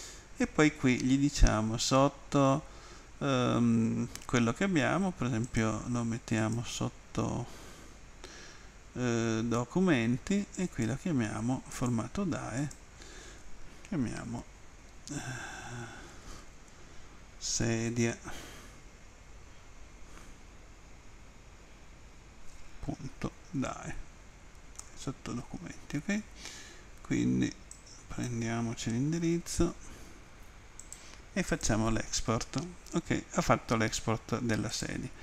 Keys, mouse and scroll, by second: 6.4 click, 10.6 click, 11.7 click, 12.6 click, 14.2 Right, 15.0 BackSpace, 15.5 BackSpace, 17.5-18.5 typing, 24.8 Return, 27.8 click, 29.3 ctrl+c, 30.8 click, 31.6 click, 34.7 click.